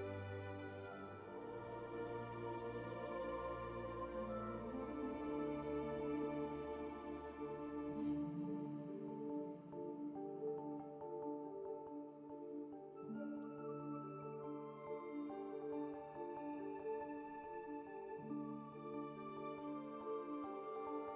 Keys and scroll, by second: 3.4 q, 4.2 alt+c, 7.7 ctrl+1, 18.1 alt+s, 19.8 ctrl+1.